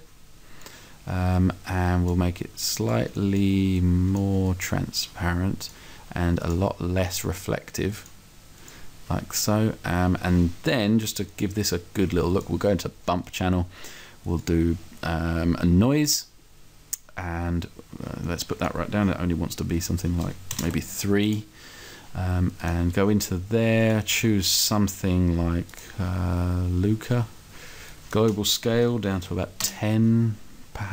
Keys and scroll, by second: 19.8 2, 20.6 BackSpace, 20.7 3, 29.2 1, 29.4 0.